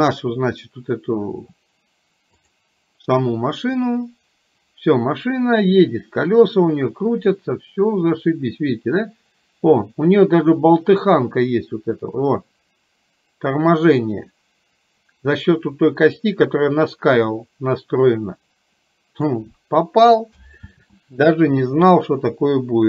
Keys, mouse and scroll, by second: 2.4 click, 4.0-19.4 drag.